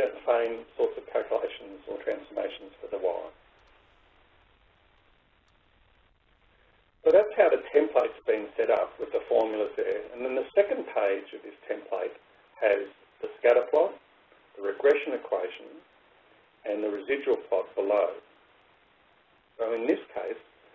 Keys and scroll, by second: 11.0 ctrl+Right.